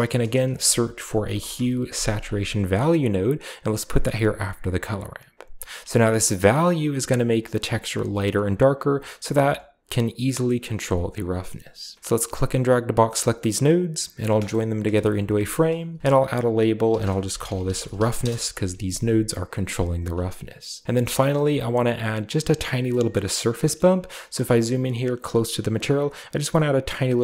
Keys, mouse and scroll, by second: 0.3 click, 1.1-1.4 typing, 2.6 click, 3.9 drag, 4.2 drag, 5.9-10.6 shift+drag, 10.6 shift+middle click, 11.0 click, 11.9 click, 12.7 click, 14.0 ctrl+j, 14.7 a, 15.1 click, 15.9 F2, 16.7-19.2 typing, 19.2 click, 20.0 click, 20.5 click, 20.8 click, 20.8-23.0 typing, 21.0 click, 21.4-22.3 scroll down 1, 23.1-23.4 shift+middle drag, 23.1-25.4 scroll up 1, 23.7-24.2 middle drag, 24.1-24.8 typing, 24.4-25.4 shift+middle drag.